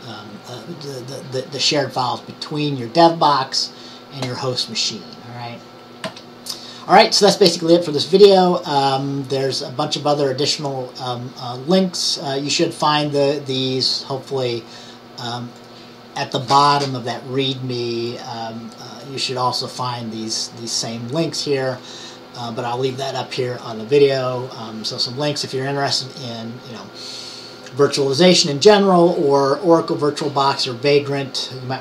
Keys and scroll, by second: 6.1 Down.